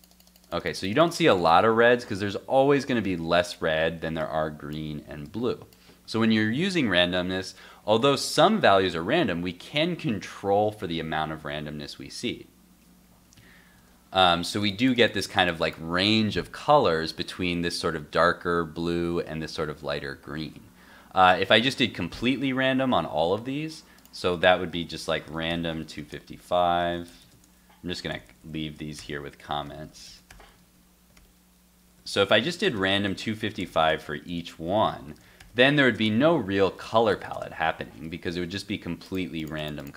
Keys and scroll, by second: 1.7 super+Tab, 13.8 super+r, 20.4 super+Tab, 22.8 super+s, 28.4 alt+Left, 33.1 super+s, 33.6 alt+Left, 33.7 alt+Left, 37.6 super+s, 38.0 super+Tab, 38.3 super+r.